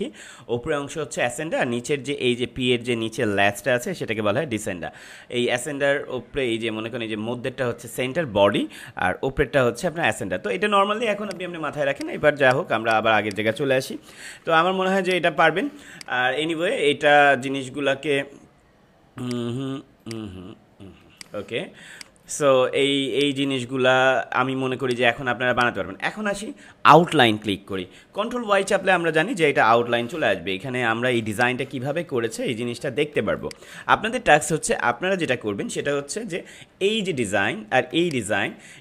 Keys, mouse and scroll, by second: 11.2 click, 11.8 space, 11.9 click, 12.3 space, 12.8 click, 13.3 space, 14.1 ctrl+-, 14.9 space, 15.0 click, 15.4 space, 15.8 click, 19.2 click, 21.7 space, 21.9 click, 22.2 space, 24.6 space, 24.7 click, 25.1 space, 25.4 click, 30.1 ctrl+y, 31.3 click, 32.4 ctrl+=, 33.1 space, 33.3 click, 33.6 space, 35.8 ctrl+y, 36.9 ctrl+-, 37.9 space, 38.0 click, 38.4 space.